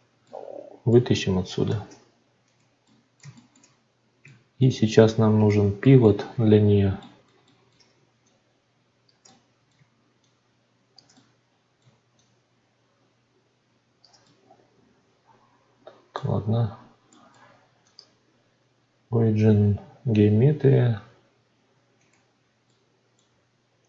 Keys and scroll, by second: 1.6 shift+d.